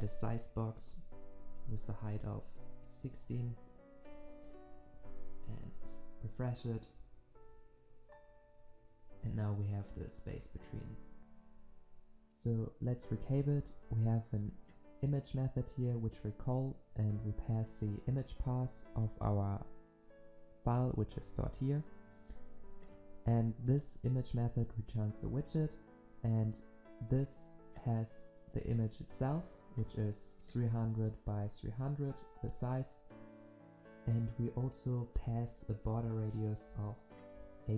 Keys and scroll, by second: 0.8 Return, 6.0 ctrl+s, 22.9 ctrl+b, 24.5 ctrl+b.